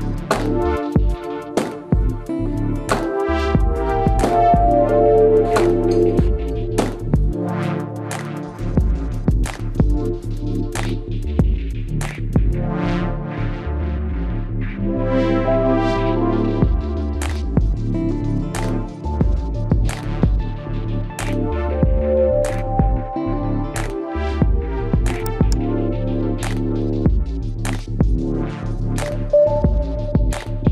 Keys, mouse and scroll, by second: 0.1 ctrl+Tab, 1.3-3.1 right drag, 2.2 b, 2.6 g, 5.2 Tab, 5.7 ctrl+s, 6.8 z, 8.8 z, 10.5 Tab, 11.4 ctrl+Tab, 13.6 c, 20.1 KP_Decimal, 21.6 i, 24.1 e, 24.9 z, 25.3 middle click, 26.7-28.1 drag, 28.0 KP_3, 28.6 Tab, 29.9 Tab, 30.5 middle click.